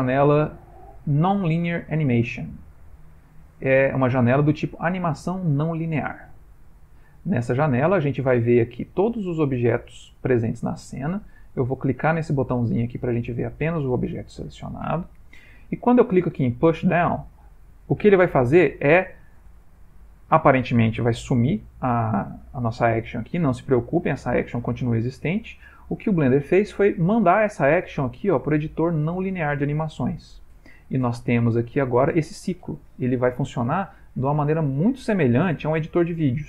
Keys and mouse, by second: 7.0 click, 12.8 click, 17.3 click, 34.3 click.